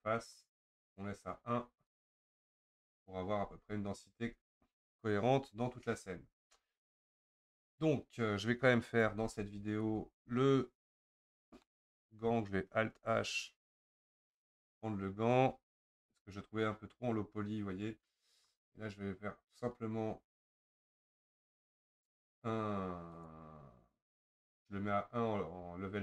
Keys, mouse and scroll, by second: 2.0 click, 2.2-3.5 middle drag, 3.5 Tab, 4.2 Tab, 9.8 Tab, 10.9 KP_Divide, 11.7-13.7 middle drag, 13.7 alt+h, 14.6 click, 16.0 Tab, 21.3 Tab, 23.2-26.0 drag.